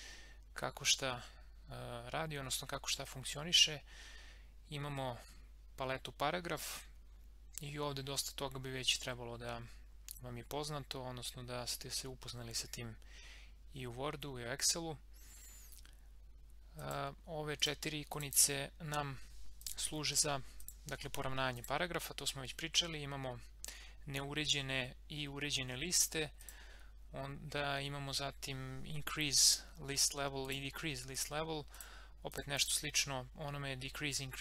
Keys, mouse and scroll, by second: 16.8 click, 26.4 click, 29.4 click.